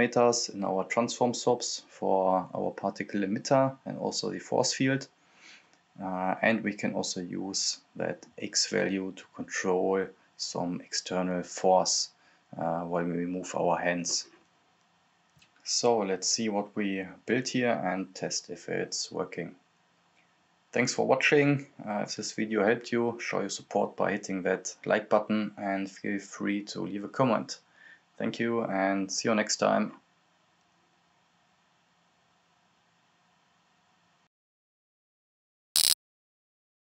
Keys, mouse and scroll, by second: 1.3-7.6 drag, 10.6 click, 11.8-12.2 scroll down 1, 12.2 click, 13.7-14.7 scroll up 1, 14.7 click, 15.2 scroll down 1, 15.9-25.4 drag.